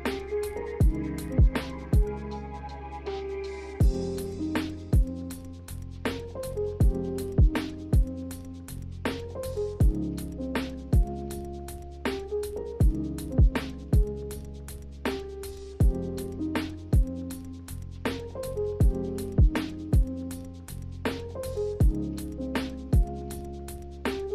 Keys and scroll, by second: 0.5 ctrl+h, 2.4-3.5 typing, 4.5 a, 10.4 z, 11.3 Left, 11.4 Left.